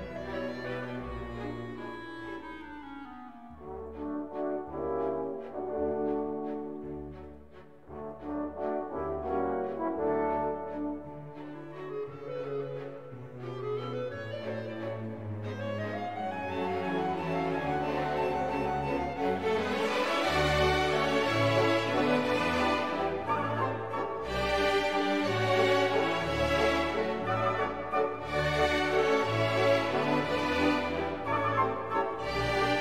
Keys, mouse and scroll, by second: 0.6 click, 1.8 BackSpace, 2.6-3.4 drag, 4.1-4.7 drag, 7.3 click, 8.7 click, 11.7 click, 13.2 click, 15.6 click, 16.6 1, 17.0 5, 19.7 click, 21.9 click, 24.0 click, 25.2 click, 25.9 click, 26.8 1, 27.1 5, 29.3 click.